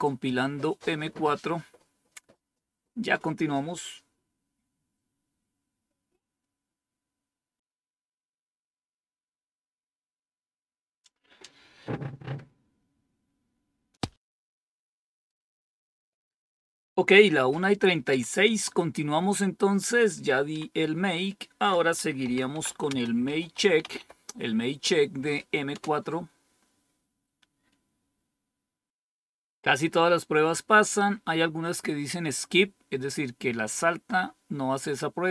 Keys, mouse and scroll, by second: 7.4 click, 13.8 click, 20.4 Down, 21.9-24.4 typing, 25.4-26.1 typing.